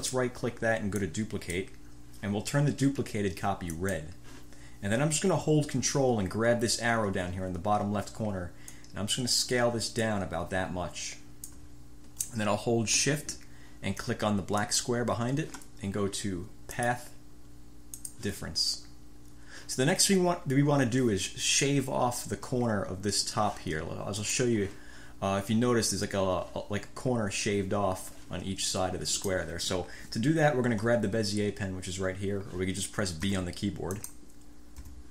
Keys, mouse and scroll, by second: 0.1 right click, 1.1 click, 3.9 click, 8.8-9.6 ctrl+scroll up 2, 9.6-10.8 ctrl+scroll up 1, 10.8 ctrl+scroll up 1, 11.0 ctrl+click, 14.7 shift+click, 16.9 click, 18.0-18.4 scroll up 1, 24.4-24.7 scroll up 1, 33.4 b, 34.9 b.